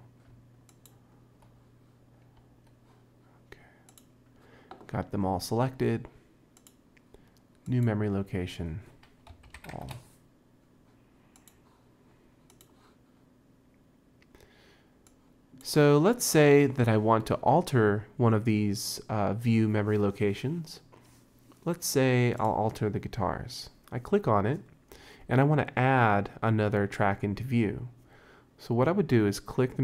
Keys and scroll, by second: 9.3-10.3 typing.